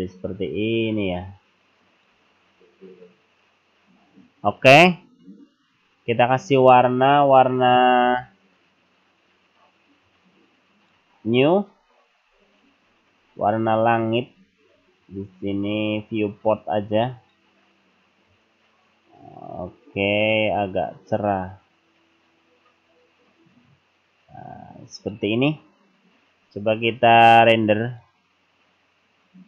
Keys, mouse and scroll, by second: 1.9 click, 10.2 click, 11.8-13.0 scroll down 11, 13.4-13.9 scroll down 6, 14.4-15.5 scroll down 7, 17.2 click, 27.8 click.